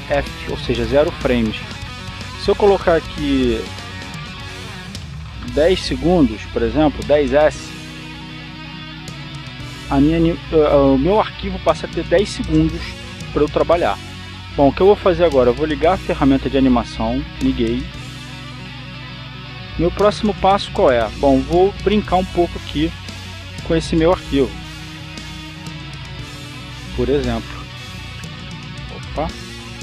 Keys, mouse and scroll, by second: 3.3 click, 4.8 KP_1, 6.4 KP_0, 7.8 s, 9.8 click, 11.1 click, 17.7 click, 20.7 click, 22.7-23.6 drag, 23.9-26.3 drag, 26.6 click, 27.9 click.